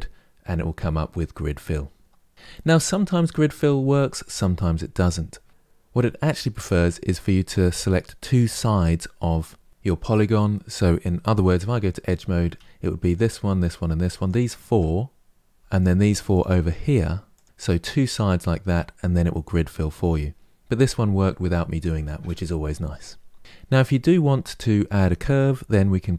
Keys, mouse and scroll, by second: 2.5-5.5 middle drag, 11.3 2, 11.8 click, 12.8 shift+click, 13.3 shift+click, 13.8 shift+click, 15.5 shift+click, 16.0 shift+click, 16.5 shift+click, 17.0 shift+click, 23.4 scroll down 5, 23.5-26.1 middle drag.